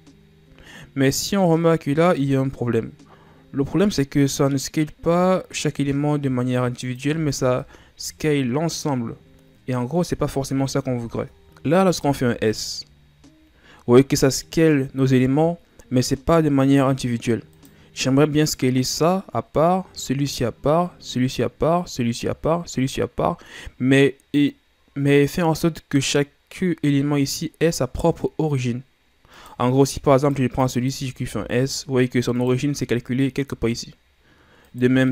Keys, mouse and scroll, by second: 7.4 Tab, 7.8-10.6 middle drag, 10.6 ctrl+z, 11.4 s, 12.2 s, 25.8 middle click, 26.6-28.2 scroll up 1, 29.6 right click, 30.3 shift+right click, 31.0 shift+right click, 31.5 s, 34.8 right click.